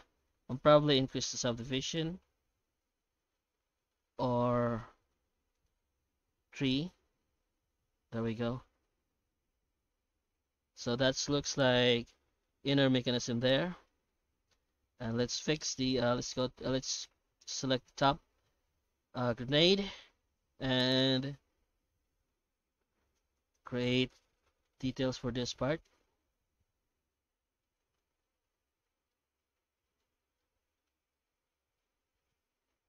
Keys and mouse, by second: 9.3-10.4 middle drag, 11.2 shift+middle click, 12.1 middle click, 13.8 shift+middle click, 14.5 middle click, 15.0 right click, 15.5 Tab, 15.8 Tab, 17.5 click, 21.5 Tab, 22.3 alt+a, 22.7 3, 23.3 alt+shift+right click, 24.1 Tab, 24.6 shift+middle click, 24.9 shift+q, 29.1 middle click, 30.4 middle click, 31.4-32.8 middle drag.